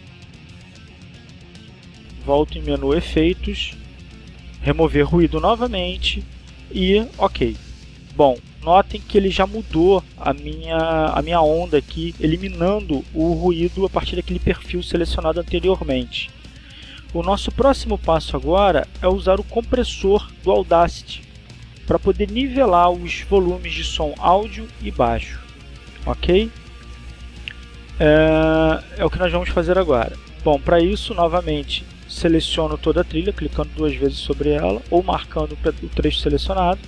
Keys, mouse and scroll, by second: 3.3 click, 5.1 click, 6.5 click, 7.5 middle click, 8.0 click, 8.6 middle click, 20.7 click, 34.6-36.6 drag.